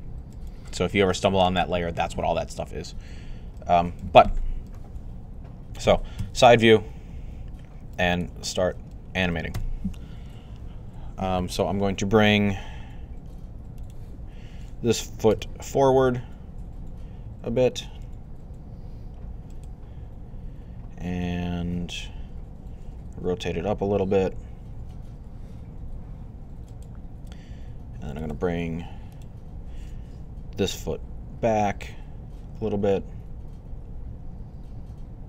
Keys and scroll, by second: 6.0 3, 15.2-15.8 typing, 23.0 r, 30.6-31.6 typing.